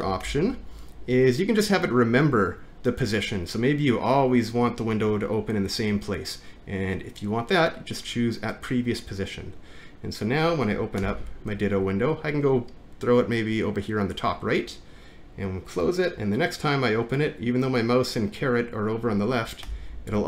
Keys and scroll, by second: 0.2 alt+`, 11.2 alt+`, 19.7 alt+`.